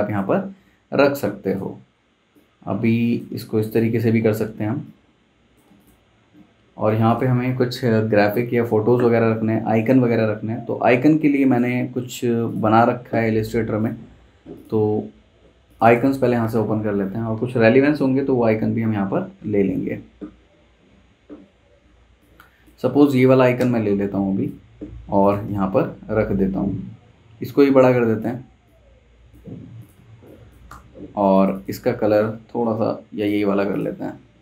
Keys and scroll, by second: 4.4 super+z, 23.2 super+c, 23.6 super+Tab, 25.5 super+v, 29.4 super+z, 30.0 z, 30.7 v.